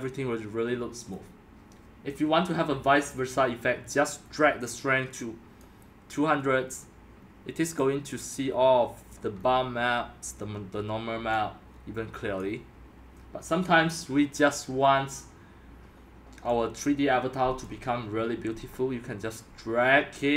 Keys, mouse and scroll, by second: 0.0-6.6 drag, 6.6 scroll down 1, 6.6-9.2 middle drag, 9.2 drag, 9.3-10.4 middle drag, 9.3 scroll, 10.4 scroll, 10.4-12.4 middle drag, 12.4-20.3 drag.